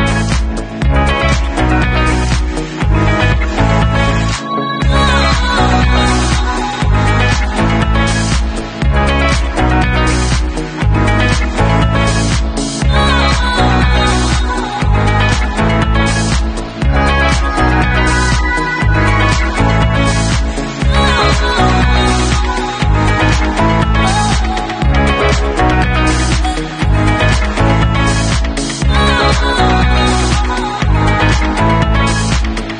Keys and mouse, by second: 1.7-3.9 middle drag, 3.9 right click, 3.9-6.2 middle drag, 6.2-9.4 drag, 9.4-13.5 ctrl+middle drag, 9.9 ctrl+v, 13.5-16.1 drag, 16.1 middle drag, 16.3-23.9 drag, 20.6 r, 21.6 w, 23.9-25.3 middle drag, 24.9 r, 25.3-32.7 drag, 26.5 w, 28.8 r, 29.9 w, 30.6 r, 31.9 w.